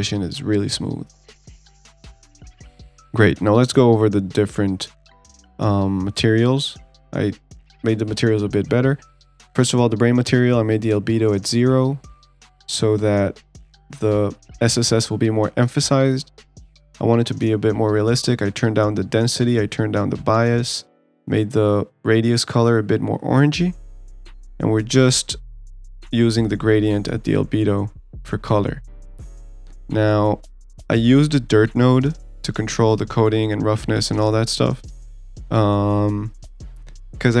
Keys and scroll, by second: 0.5 ctrl+s.